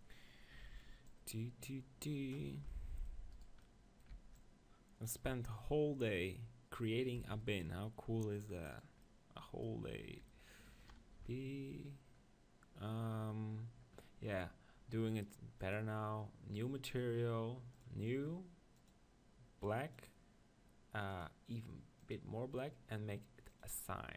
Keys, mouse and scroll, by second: 0.7 c, 3.4-4.9 drag, 4.1 c, 4.9-7.9 middle drag, 6.0-7.1 right drag, 7.3 c, 9.0-11.2 middle drag, 11.2 p, 15.7-24.1 drag.